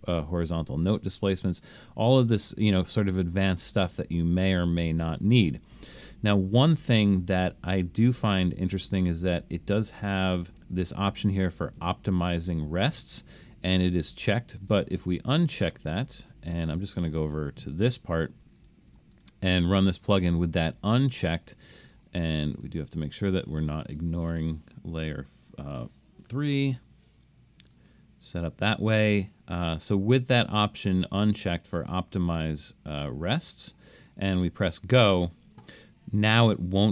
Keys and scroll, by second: 25.2 3, 26.3 BackSpace, 26.8 4.